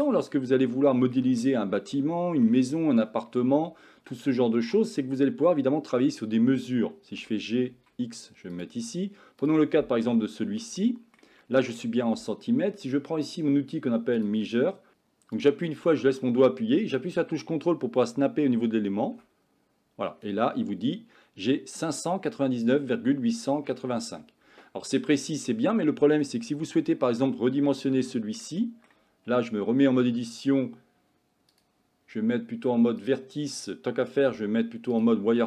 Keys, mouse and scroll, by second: 0.8-1.2 shift+middle drag, 1.4-2.0 middle drag, 2.2-2.5 shift+middle drag, 7.2 g, 10.2-10.7 shift+middle drag, 10.8 middle click, 11.5-11.8 shift+middle drag, 15.4-20.3 drag, 25.5 middle click, 27.0 middle click, 28.0-28.5 shift+middle drag, 28.6 middle click, 29.3 Tab, 29.6 middle click, 31.6 click, 34.3 z.